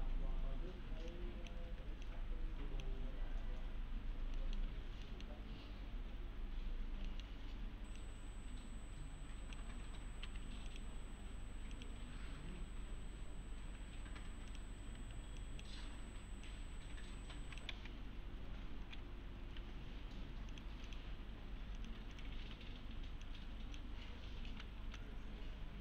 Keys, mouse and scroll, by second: 1.1-1.7 click, 3.8-4.4 scroll up 1, 4.4 middle click, 6.8-7.4 scroll down 2, 7.1 middle click, 7.4-8.0 scroll up 1, 8.0-9.9 click, 10.3 2, 10.7 click, 12.3 1, 14.5 click, 15.0 1, 15.4 click, 17.7 alt+x, 19.6 1, 20.5 click, 22.5 1, 23.3-23.9 click, 24.0-24.5 scroll up 1, 24.5 s, 24.8 s, 25.0-25.8 click.